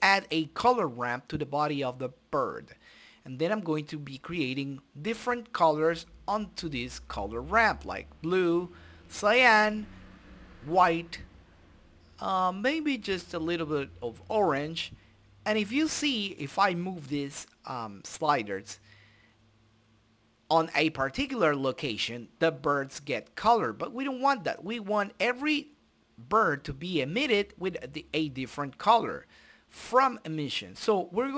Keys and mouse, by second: 1.3-3.1 drag, 4.2 click, 5.0-6.7 drag, 7.3-9.1 drag, 9.8 click, 10.7 click, 13.3 click, 14.6-17.0 drag, 18.9-20.2 drag, 21.1 click, 23.5 middle click, 24.5 click, 26.0 click, 26.1 shift+a, 28.5-29.7 drag, 28.7 shift+a.